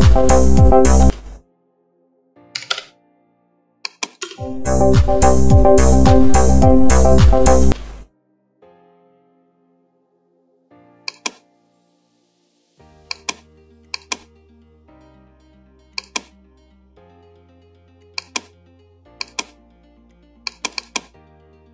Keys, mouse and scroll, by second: 1.1 space, 2.8-4.3 drag, 4.3 space, 7.8 space, 11.2 click, 16.1 click.